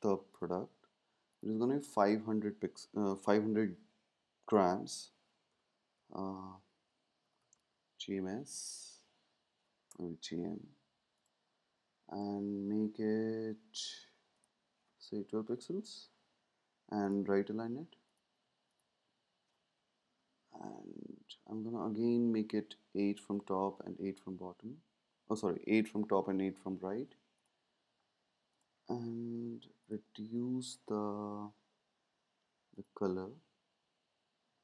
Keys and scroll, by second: 5.2-8.0 typing, 15.3 Down, 15.4 Down, 20.0-20.6 Left, 20.8 Left, 20.9 Left, 21.0 Left, 21.2 Left, 23.1 Down, 23.2 Down.